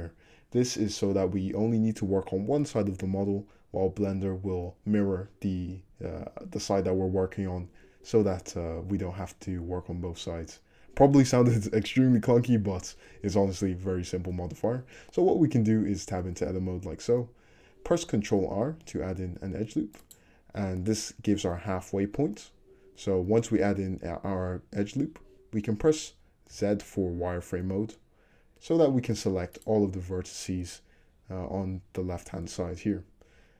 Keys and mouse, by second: 14.7 click, 16.6 Tab, 16.6-18.3 middle drag, 18.3 ctrl+click, 18.8 ctrl+r, 26.5 z, 29.6 click, 32.4-33.5 middle drag.